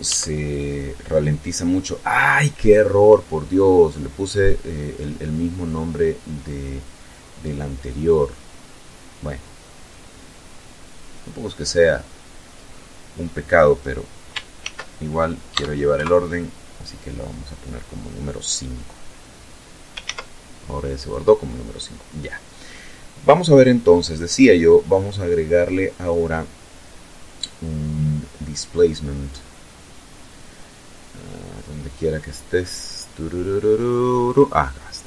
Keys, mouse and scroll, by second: 13.7 ctrl+shift+s, 14.6 KP_Add, 15.0 KP_Enter, 19.1 ctrl+s, 20.1 click, 23.4 click, 27.6 click, 33.3 click.